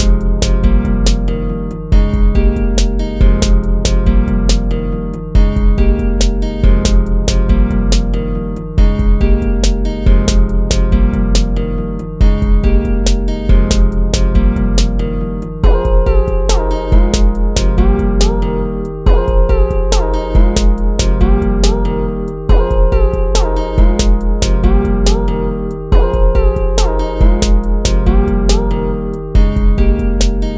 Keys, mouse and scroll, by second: 1.0 ctrl+z, 3.0 ctrl++, 4.0 ctrl+-, 4.6 ctrl++, 5.2 ctrl++, 6.2 ctrl++, 6.9 ctrl++, 11.5 ctrl+-, 12.7 ctrl++, 18.5 ctrl+-, 19.3 ctrl+-, 21.7 ctrl++, 24.4 ctrl+-, 24.8 ctrl++, 27.3 ctrl+-, 27.6 ctrl++, 29.1 ctrl+-, 29.6 ctrl++, 30.0 ctrl++.